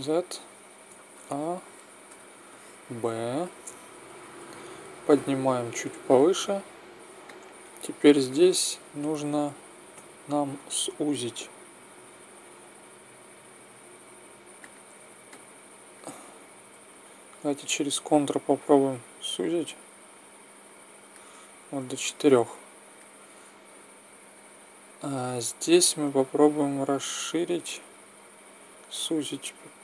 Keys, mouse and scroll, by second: 0.8 a, 2.1 b, 4.9 click, 9.9 a, 10.5 a, 14.6-16.5 drag, 16.5 middle click, 17.4-19.3 drag, 22.0-24.2 middle drag, 25.3-26.6 middle drag, 26.6-28.4 drag.